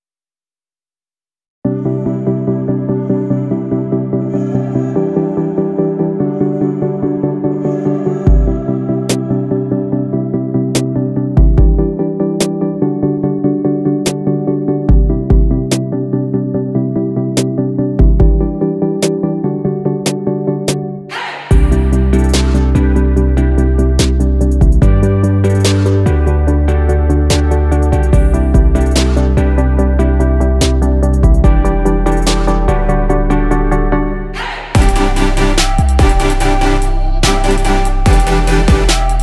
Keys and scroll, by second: 20.4 ctrl+z.